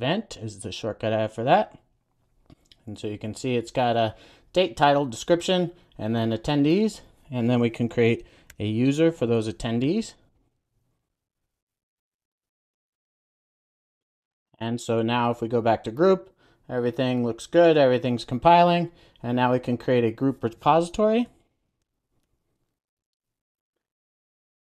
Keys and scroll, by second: 0.8 Return, 1.6 super+s, 8.4 super+n, 11.2 super+a, 12.9 Return, 13.8 super+s, 22.1 super+n.